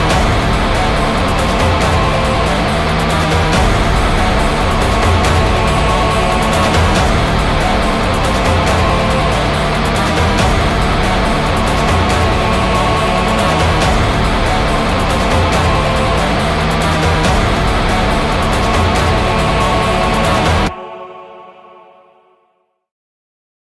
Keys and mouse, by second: 2.1 right click, 3.0 ctrl+z, 3.6 ctrl+z, 4.0 ctrl+z, 5.0 ctrl+z, 6.1 ctrl+z, 6.4 ctrl+z, 7.1 right click, 7.9 ctrl+z, 8.3 ctrl+z, 8.9 ctrl+z, 9.3 right click, 9.9 ctrl+z, 10.8 ctrl+z, 11.0 ctrl+z.